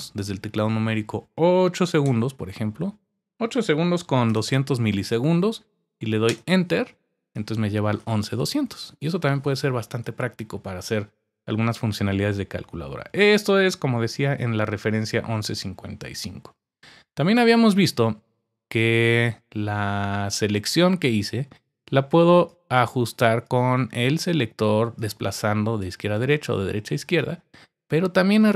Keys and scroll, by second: 1.8-2.5 typing, 3.7-4.9 typing, 6.0-6.8 typing.